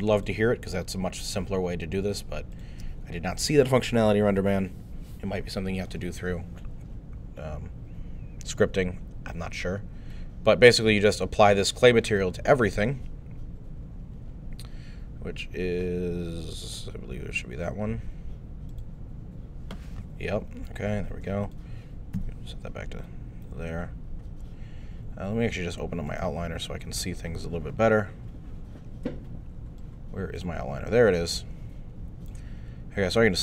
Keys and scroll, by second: 22.2 alt+3, 22.9 alt+3.